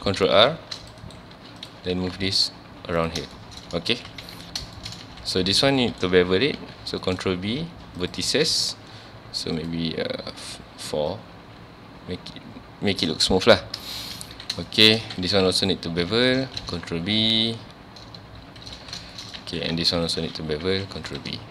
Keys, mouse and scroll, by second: 0.2 1, 0.6 ctrl+r, 1.1 right click, 1.3 1, 1.6 click, 1.9 g, 3.1 click, 3.4-3.9 shift+middle drag, 3.9 ctrl+s, 4.2 z, 4.8 shift+middle click, 5.0 ctrl+s, 5.5 click, 5.8 shift+middle drag, 6.0 scroll up 1, 6.6 ctrl+b, 8.0 click, 9.6-13.7 drag, 13.7 scroll down 2, 13.9 shift+middle click, 14.3 ctrl+s, 14.7 shift+middle click, 15.2 2, 15.6 alt+click, 17.0 ctrl+b, 18.7 click, 18.8 alt+a, 19.1 shift+middle click, 19.4 ctrl+s, 19.7 1, 19.9 click, 20.6 ctrl+b, 21.2 click.